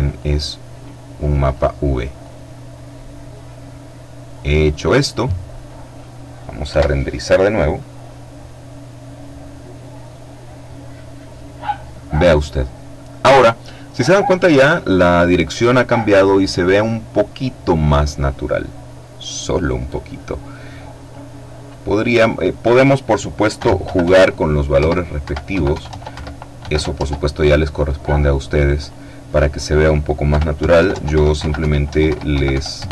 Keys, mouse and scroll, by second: 1.4-4.2 drag, 5.8 F12, 20.2 click, 22.7 KP_Subtract, 23.0 KP_Decimal, 23.2 KP_5, 23.9 Tab, 24.4 KP_Subtract, 24.6 KP_Decimal, 24.8 KP_5, 25.0 Tab, 25.2 KP_Subtract, 25.7 KP_Decimal, 25.8 KP_5, 26.1 Tab, 27.9-29.0 drag, 29.4 KP_Subtract, 29.7-31.6 typing, 30.0 Tab, 30.2 KP_Subtract, 31.0 Tab, 31.2 KP_Subtract, 31.9 KP_Enter.